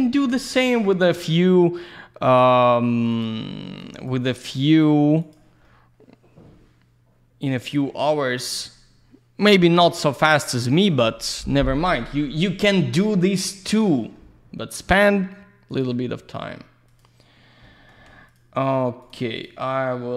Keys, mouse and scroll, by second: 0.0 scroll up 1, 0.3 alt+middle click, 0.8 click, 3.1 click, 4.0 click, 5.2 click, 5.6 alt+middle click, 9.4 click, 12.7 alt+middle click, 13.2 middle click, 13.5 F3, 13.9 scroll down 1, 14.1 alt+middle click, 15.7 click, 16.0 alt+middle click, 16.9 click, 17.6 alt+middle click, 18.3 ctrl+click, 19.0 click, 19.3 click.